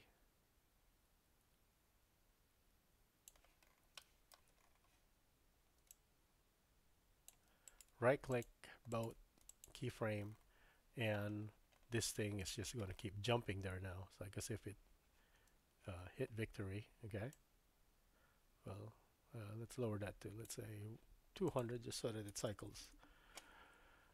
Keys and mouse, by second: 4.0 shift+middle drag, 5.9-7.4 shift+drag, 7.7 right click, 8.9 right click, 12.4 typing, 15.4 space, 17.5-20.5 drag, 21.5-23.4 drag, 22.6 KP_0.